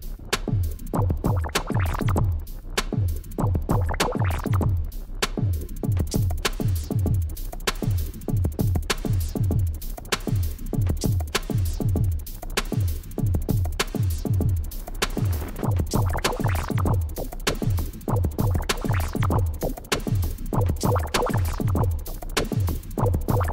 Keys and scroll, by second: 0.0 Down, 0.8 ctrl+[, 3.2 Delete, 6.8 Right, 6.9 Down, 7.0 Right, 8.5 ctrl+[, 9.6 Down, 9.8 Up, 10.1 Down, 10.6 Up, 11.1 Up, 11.4 Down, 11.8 Up, 12.0 Down, 13.1 Right, 13.4 Down, 15.5 Left, 15.7 Up, 15.9 Down, 16.0 Right, 16.2 Down, 16.6 Up, 17.1 Up, 17.4 Down, 19.2 Left, 19.5 Right, 19.7 ctrl+z, 21.2 Delete, 21.6 ctrl+z, 23.1 ctrl+x, 23.3 ctrl+z, 23.4 ctrl+c.